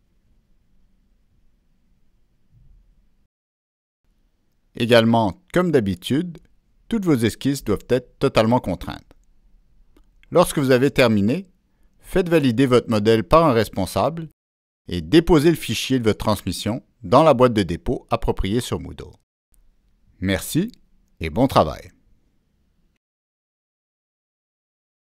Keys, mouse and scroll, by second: 0.1-4.4 middle drag, 4.9-12.8 middle drag, 9.5-9.8 scroll up 1, 15.1-16.5 middle drag, 19.0 ctrl+s, 23.1 ctrl+s.